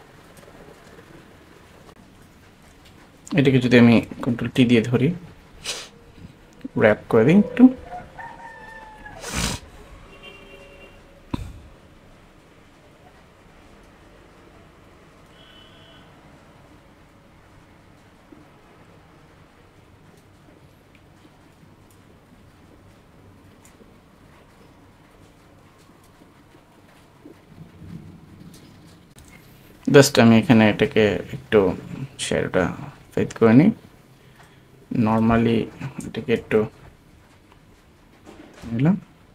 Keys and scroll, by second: 3.5 shift+super+space, 5.4 super+t, 36.4 super+t.